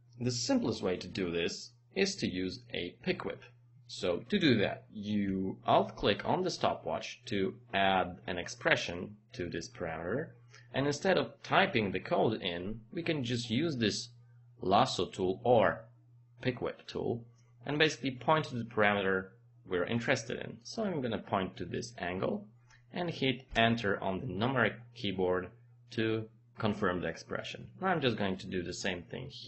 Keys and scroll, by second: 23.5 Return.